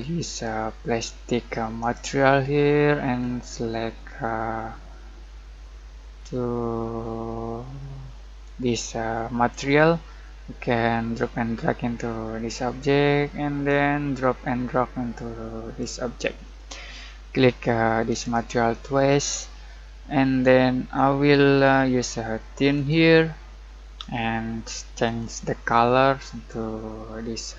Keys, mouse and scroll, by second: 0.4-18.1 drag, 20.9-24.9 drag, 25.0-27.5 drag.